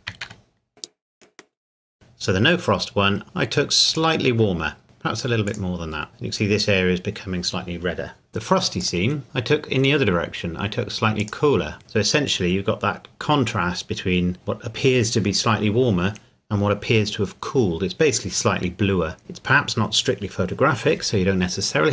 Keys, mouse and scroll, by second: 0.3 shift+d, 1.1 click, 3.9 click, 5.5 click, 8.3 middle click, 8.8 click, 11.2 click, 19.2-19.6 scroll up 1.